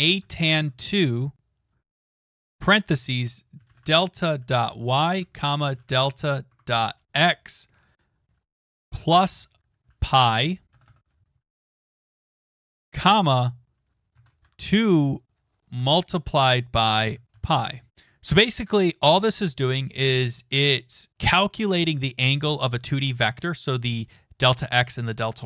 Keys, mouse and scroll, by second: 0.0-7.3 typing, 6.5 Tab, 7.6 Right, 10.6-12.8 typing, 13.9-17.8 typing, 17.9 click.